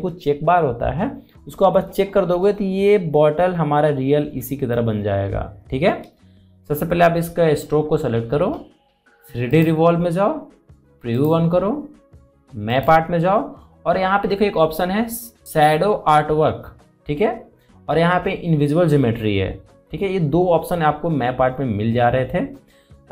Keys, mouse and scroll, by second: 10.1 click.